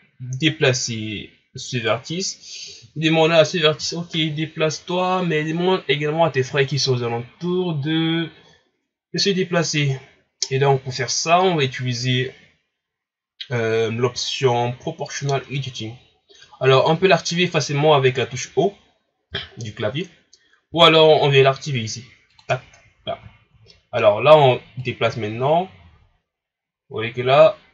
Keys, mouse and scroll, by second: 1.7 right click, 19.3 o, 20.7 o, 22.3 click, 23.3 shift+scroll down 2, 23.7-24.8 middle drag, 24.8-27.7 drag.